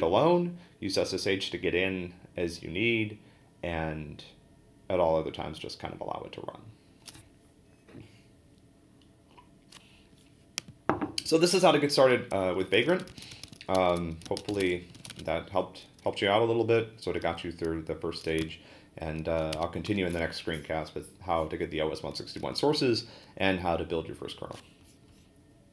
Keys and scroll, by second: 12.7-15.5 typing, 18.4 ctrl+l, 19.5 ctrl+d, 19.9 ctrl+l.